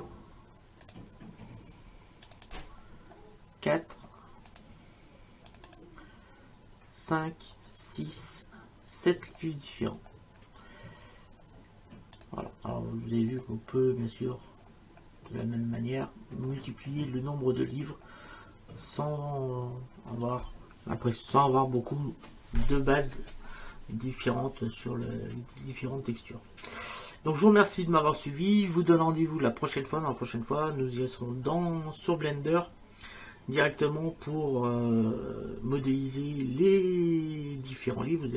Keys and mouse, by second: 0.9 click, 2.3 click, 4.5 click, 12.2 click.